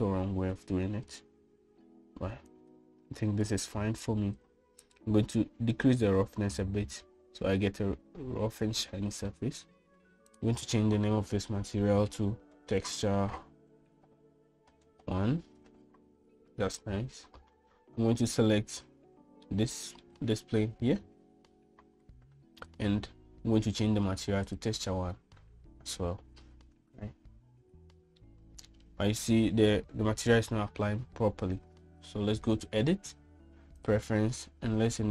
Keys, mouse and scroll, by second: 3.3-4.4 drag, 6.8-10.1 drag, 11.2-17.5 drag, 20.3-20.9 middle drag, 23.6-25.5 drag, 29.1 middle click, 33.4-35.1 drag.